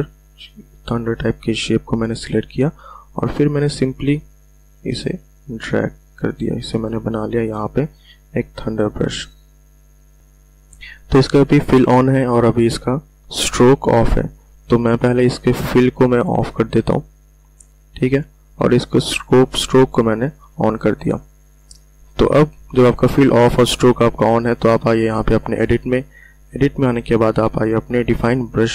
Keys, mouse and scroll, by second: 9.2 v, 9.8-13.2 drag, 14.4 click, 25.5 click.